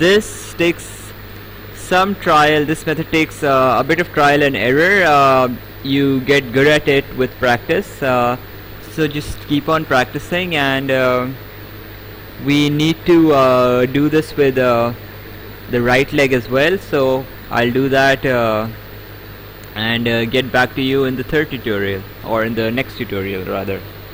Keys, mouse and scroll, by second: 3.1 click, 4.5 click, 7.6 ctrl+z, 9.4 right click, 15.8 click, 16.7 right click, 20.7 right click.